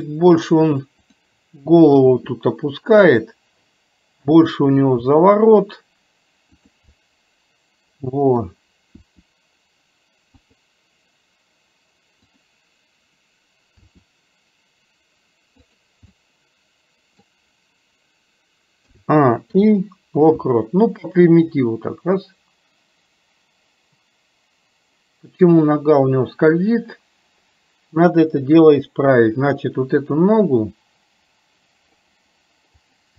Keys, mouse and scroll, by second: 1.2 click, 4.3 click, 7.1-8.4 middle drag, 12.3 click, 16.2-17.2 middle drag, 21.7-32.2 drag, 32.8 click.